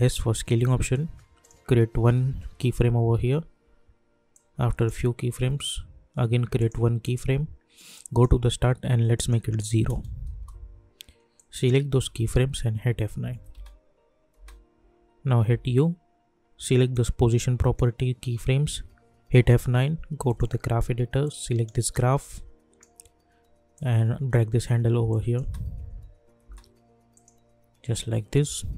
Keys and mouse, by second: 1.4 click, 2.6 =, 2.8 =, 3.1 =, 4.3-6.5 drag, 10.3 Return, 11.3 click, 12.7 F9, 13.5 space, 15.4 u, 16.9-19.3 drag, 19.3 F9, 20.2-25.1 drag, 25.4 space, 27.1 click, 28.3 -, 28.6 -.